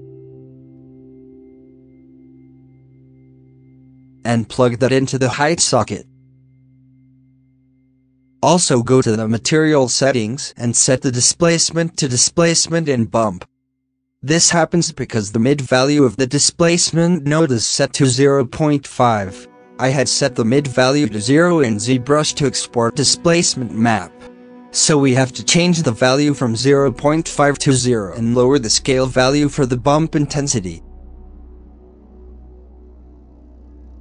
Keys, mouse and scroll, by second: 0.0 click, 0.6-2.9 drag, 3.2-6.7 drag, 6.7 middle click, 7.0 scroll up 2, 9.7-13.6 drag, 13.6-24.5 middle drag, 24.6 middle drag, 24.8-25.5 middle drag, 26.6-28.2 drag, 28.7 click, 29.8 ctrl+s, 30.3 shift+middle drag, 30.5-30.8 scroll up 6, 30.8 shift+middle click, 31.9 scroll down 19, 32.1 middle click, 32.4 click, 33.9 scroll up 6.